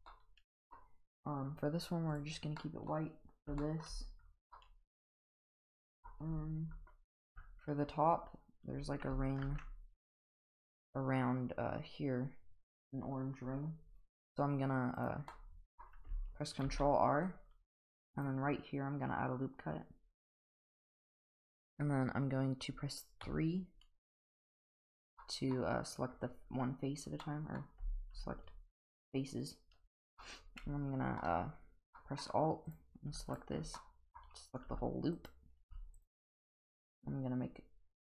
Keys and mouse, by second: 0.1-0.7 middle drag, 2.6-2.9 middle drag, 3.6 shift+middle drag, 4.5-6.1 middle drag, 7.2 Tab, 9.4 ctrl+r, 15.3 middle click, 16.7 ctrl+r, 23.2 3, 25.2 middle click, 27.2 middle click, 29.4 alt+click, 30.2-31.2 middle drag, 32.0 middle click, 32.7 click, 33.3 alt+click, 33.8 middle click, 34.7 g, 35.6 g.